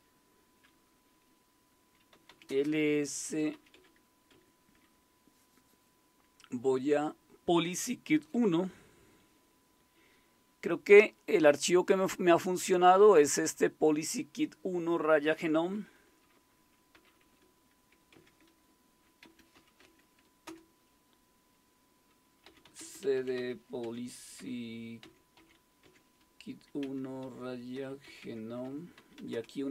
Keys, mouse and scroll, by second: 1.9-4.3 typing, 16.9 typing, 18.1-20.4 typing, 22.2-25.4 typing, 26.8-29.5 typing.